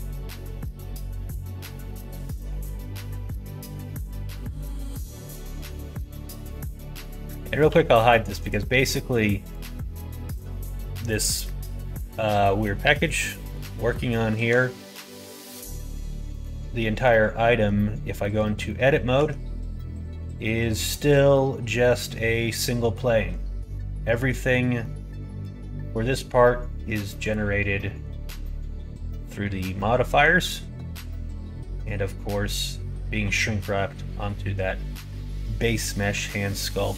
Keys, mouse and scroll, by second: 0.5 middle click, 2.3 middle click, 3.0 middle click, 4.2 shift+middle click, 4.6 middle click, 6.4 middle click, 7.1 middle click, 7.6 h, 8.3 click, 8.9 middle click, 9.4 click, 9.7 middle click, 10.2 middle click, 11.0 middle click, 11.8 middle click, 12.9 middle click, 13.3 middle click, 14.3 alt+z, 16.2 middle click, 16.7 middle click, 17.4 middle click, 18.1 middle click, 18.6 middle click, 19.3 Tab, 21.3-22.9 middle drag, 24.7 middle click, 27.2 click, 30.0 middle click, 32.6 middle click, 35.9 middle click, 36.5 middle click.